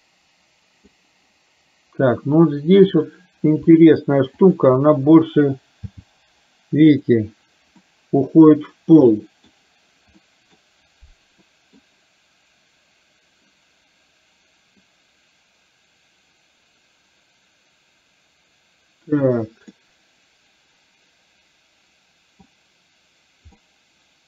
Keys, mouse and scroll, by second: 0.2 click, 3.0 click, 4.5 shift+click, 6.1 g, 8.0-9.5 middle drag, 10.2 middle click, 11.5 middle click, 14.9-19.3 drag, 19.7-22.5 middle drag, 23.6-24.2 middle drag.